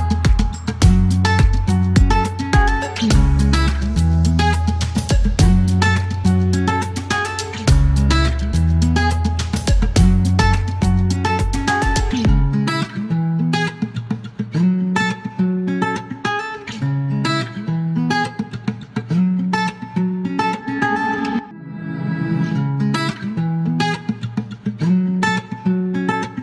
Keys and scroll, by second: 5.4 F1, 6.0 ctrl+a, 6.0 ctrl+e, 9.2 ctrl+a, 10.5 ctrl+a, 10.5 ctrl+e, 15.4 Delete, 16.0-16.9 typing, 19.0-21.6 typing, 19.0 Return, 22.7 space.